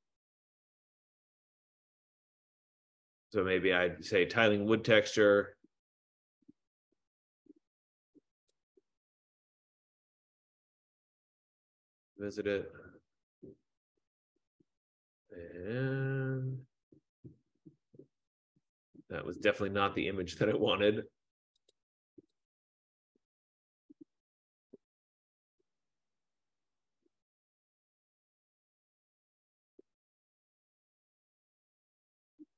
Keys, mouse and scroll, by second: 0.0-0.6 typing, 5.4 typing, 6.1 scroll down 1, 8.8 click, 11.3 click, 12.4 F15, 16.6-17.2 scroll, 17.6 scroll down 5, 18.5 scroll up 2, 18.7-21.8 scroll, 21.8 scroll, 22.1 click, 22.9 click, 25.8-26.1 scroll, 26.1-26.4 scroll down 4, 26.9-27.6 scroll down 2, 27.7-28.8 scroll down 3, 28.8-30.1 scroll down 4, 30.1-31.2 scroll down 1, 31.2-31.7 scroll down 1, 31.9-32.5 scroll down 3.